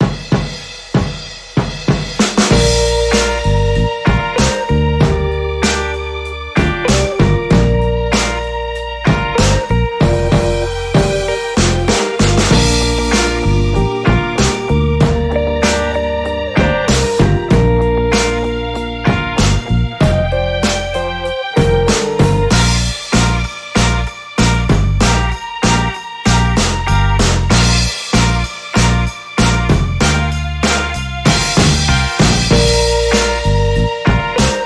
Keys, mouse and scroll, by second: 0.8 click, 2.0 click, 3.4-4.9 drag, 5.6-7.1 drag, 8.0 KP_Subtract, 8.3 KP_1, 8.6 KP_Decimal, 8.8 KP_5, 9.2 KP_Enter, 10.9 click, 12.6 click, 13.4 ctrl+shift+click, 15.0 d, 15.4 click, 15.9 shift+click, 16.6 click, 17.4-19.4 drag, 19.8 ctrl+d, 21.4 click, 22.5 click, 23.9 click, 25.2-27.0 drag, 27.2 d, 27.6 click, 28.8 shift+click, 29.8 d, 30.6 click, 31.9 click, 32.4 click, 33.4 click.